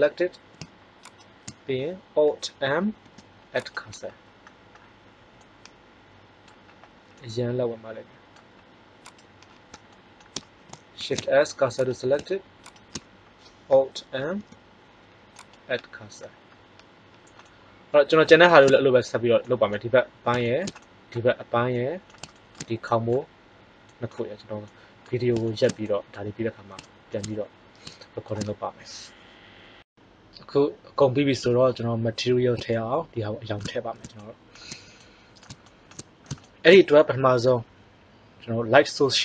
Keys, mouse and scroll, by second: 1.0-2.8 drag, 2.8 alt+m, 9.4 middle click, 10.9 shift+s, 14.1 alt+m, 26.8 middle click, 32.6-33.9 middle drag.